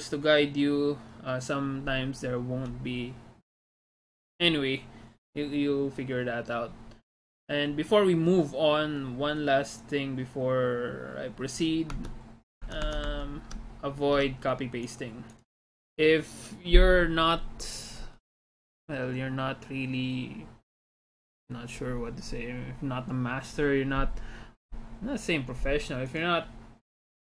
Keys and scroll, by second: 12.0 alt+Tab, 12.7 alt+Tab, 13.0 alt+Tab, 13.2 alt+Tab, 14.6 alt+Tab.